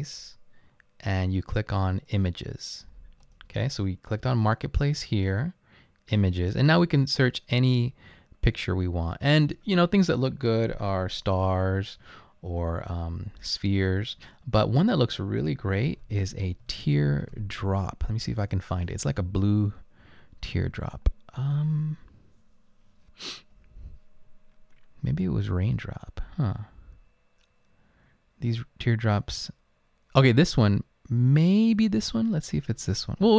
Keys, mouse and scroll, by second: 15.7-18.1 typing, 18.5 Return.